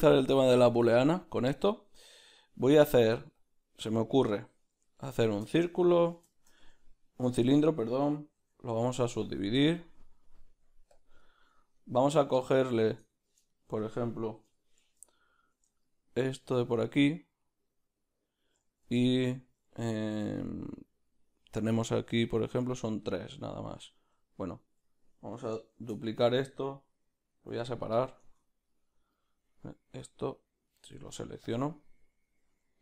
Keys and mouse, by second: 5.0-15.2 ctrl+middle drag, 7.4 Tab, 8.4 ctrl+r, 14.5 3, 15.2-20.1 alt+right drag, 20.1-24.5 ctrl+middle drag, 24.5-25.8 alt+right drag, 25.8 shift+d, 28.0 p, 28.4 Tab, 28.7-31.6 right drag, 31.6 z, 31.8-32.8 right drag.